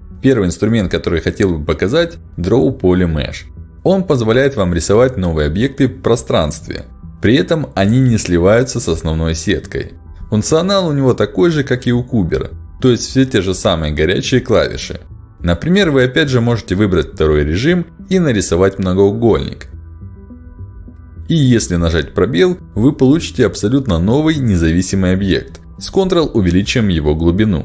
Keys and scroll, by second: 9.7 h, 21.6 space, 26.1 space.